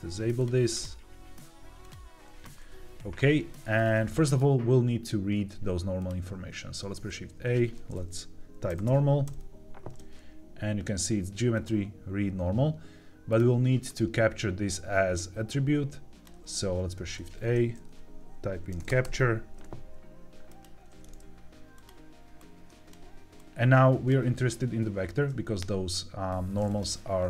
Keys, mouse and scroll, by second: 0.0 click, 0.6-2.1 drag, 3.6-4.0 scroll down 2, 4.0 middle click, 5.9 click, 6.5 shift+a, 13.8-16.2 drag, 16.7 shift+a, 22.3 click, 23.3 click, 26.6-27.2 drag.